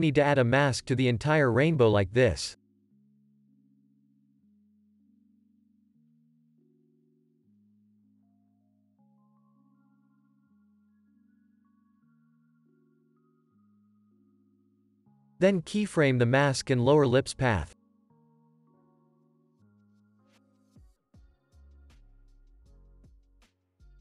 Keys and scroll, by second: 1.2 space, 4.0 space, 10.2 ctrl+s, 13.4 u, 14.3 m, 15.9 u, 20.3 ctrl+s, 21.4 u, 22.0 ctrl+s.